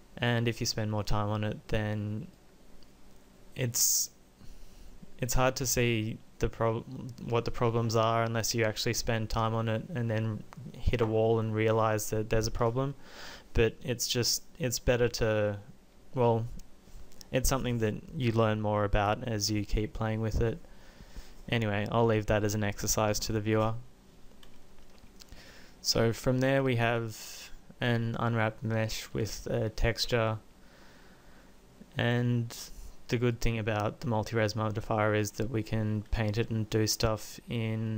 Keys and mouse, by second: 2.6 click, 4.0 click, 30.2 Tab.